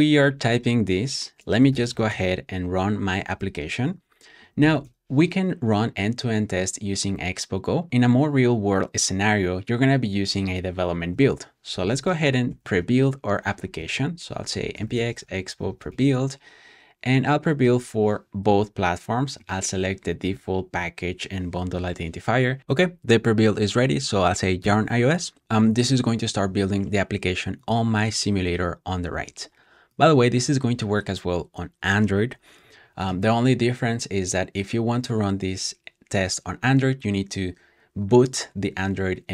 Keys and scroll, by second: 1.6-5.0 typing, 11.4-13.0 typing, 18.2-19.0 typing, 22.3-23.1 typing, 24.5 typing.